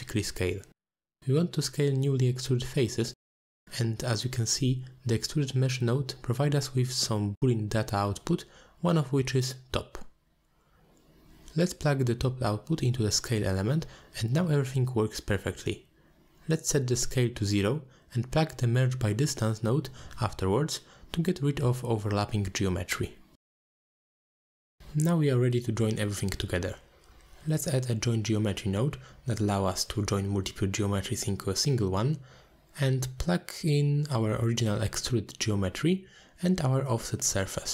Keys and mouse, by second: 2.9-4.5 middle drag, 7.6-8.8 drag, 9.6 middle drag, 11.7-15.9 shift+drag, 16.5 click, 19.0 ctrl+a, 19.3 middle click, 19.5 ctrl+a, 24.2 middle click, 24.9 shift+a, 28.2 click, 28.9-32.0 drag, 32.2 click, 32.6 middle click, 34.4-36.6 shift+drag, 37.0-37.7 middle drag.